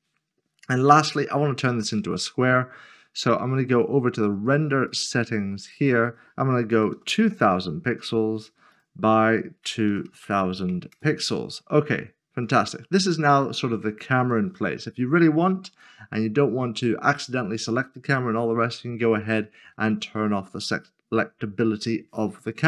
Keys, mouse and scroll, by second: 3.7 click, 6.9 typing, 8.4 click, 9.7-10.2 typing, 12.4 click, 14.9 click.